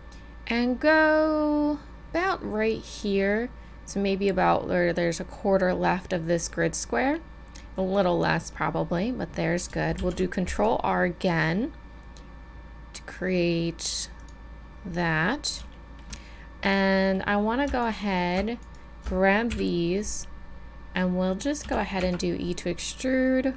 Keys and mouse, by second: 10.0 ctrl+r, 16.2 middle click, 19.5 KP_1, 21.7 e, 22.6-23.5 drag.